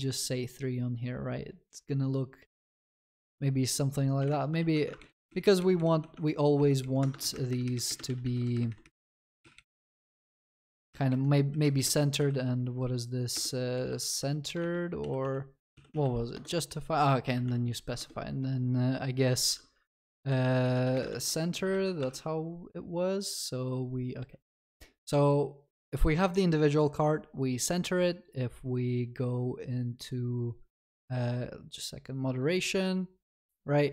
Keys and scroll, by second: 4.7 ctrl+s, 5.0 ctrl+shift+Left, 6.0 ctrl+shift+Right, 6.8 ctrl+shift+Left, 7.2 ctrl+c, 8.2 ctrl+v, 10.7 ctrl+v, 14.6 ctrl+BackSpace, 16.4 Return, 18.0 ctrl+BackSpace, 21.2 ctrl+s.